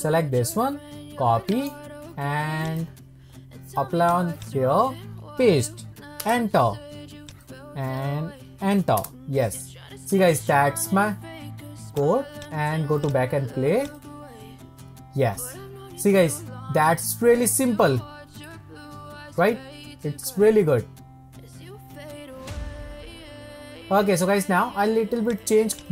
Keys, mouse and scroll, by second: 4.0 click, 4.4-10.3 drag, 11.9 click, 12.4-16.8 drag, 25.3-25.9 drag.